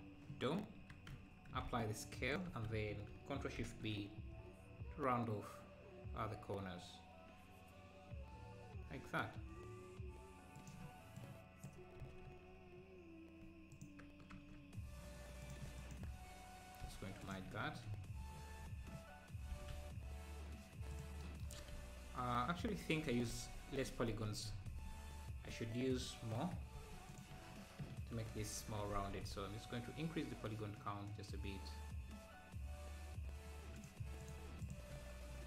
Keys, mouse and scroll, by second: 1.1 Tab, 1.7 ctrl+a, 2.5 Tab, 3.7 ctrl+shift+b, 6.7 ctrl+shift+b, 11.2 click, 12.0 s, 14.4 KP_Decimal, 14.8-15.4 scroll up 2, 15.4-16.8 drag, 16.8 m, 17.5 Tab, 17.7 scroll down 3, 17.9 `, 18.4 scroll down 1, 18.6 `, 19.5 g, 21.2 g, 21.5 Tab, 21.7 `, 23.2 ctrl+z, 23.5 ctrl+z, 24.6 ctrl+z, 25.6 Tab, 26.4 Tab, 26.8 ctrl+a, 27.4 ctrl+a, 27.4 Tab, 28.5 ctrl+shift+b, 34.2-35.4 drag.